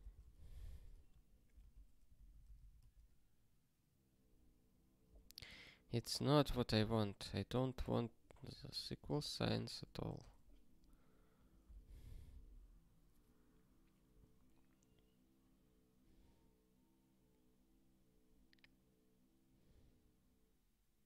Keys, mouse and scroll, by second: 0.3 ctrl+s, 1.1 ctrl+n, 1.6 ctrl+alt+x, 2.1 ctrl+n, 2.3 ctrl+n, 2.8 ctrl+alt+x, 11.3 click, 11.9 alt+., 14.0 scroll up 1, 18.1 scroll up 1.